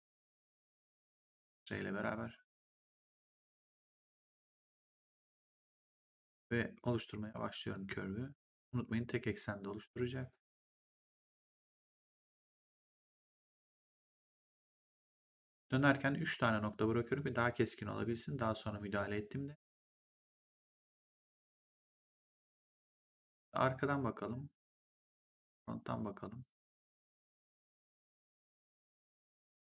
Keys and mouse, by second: 0.3 click, 4.6 click, 7.1 click, 12.7 click, 14.3 click, 17.9 click, 20.1 click, 21.3 click, 22.8 click, 23.6 right click, 25.3 click.